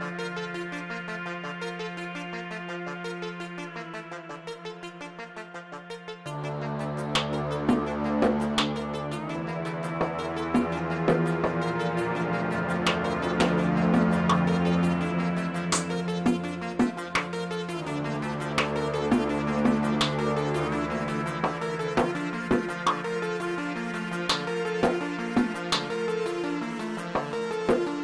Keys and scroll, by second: 4.4 ctrl+c, 6.7 ctrl+v, 19.6 shift+d, 19.9 z, 22.8-24.4 typing, 24.7 Return, 26.0 3, 27.3 g.